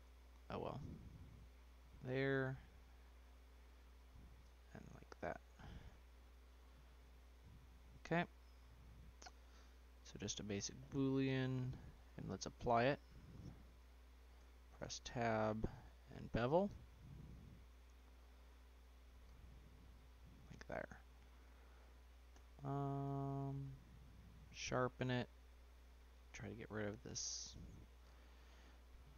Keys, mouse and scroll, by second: 1.3-4.3 middle drag, 5.2 Return, 5.6-9.0 middle drag, 9.0 scroll down 1, 9.2-9.7 middle drag, 9.7 scroll down 2, 9.9 middle click, 10.2-12.2 scroll up 4, 12.2-13.6 drag, 14.3 Tab, 14.7 scroll up 2, 14.8-16.1 middle drag, 16.1 ctrl+b, 19.3 Tab, 19.8-20.7 middle drag, 20.7 scroll down 2, 20.9-22.3 middle drag, 22.3 q, 25.3-26.7 drag, 26.7-27.4 middle drag, 27.4-27.7 scroll down 2, 28.5 Tab, 29.0-29.1 middle drag.